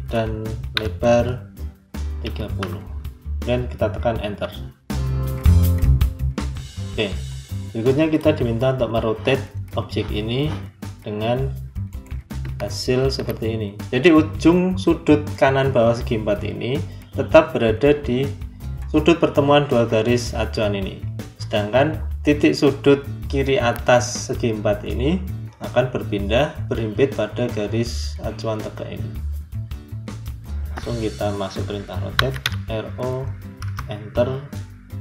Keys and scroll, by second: 4.1 Return, 32.0 r, 32.3 o, 33.5 Return.